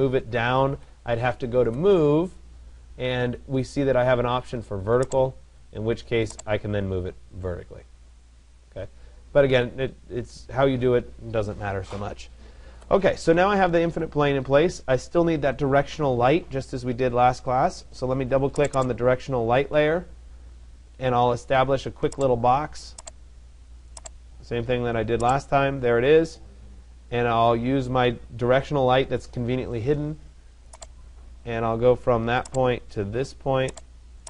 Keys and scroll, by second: 0.3 Escape, 9.1 Escape.